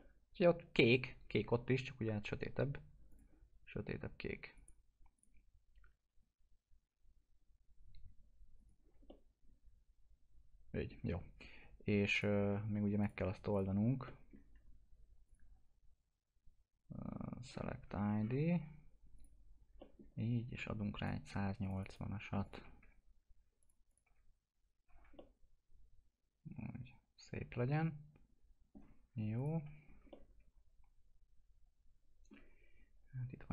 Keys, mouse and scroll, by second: 3.1 click, 8.5 click, 9.0-12.1 alt+middle drag, 12.1 click, 14.0 alt+middle click, 14.7 scroll up 1, 15.2 click, 17.1-18.1 scroll down 1, 19.1 click, 19.8 alt+middle click, 20.9 click, 22.8 F4, 23.6 click, 24.0 F4, 24.8 scroll down 1, 25.4-29.0 alt+middle drag, 29.0 scroll up 1, 29.3 click, 29.6 F4, 29.8 scroll down 1, 30.4-32.5 alt+middle drag, 32.5-33.5 scroll up 1.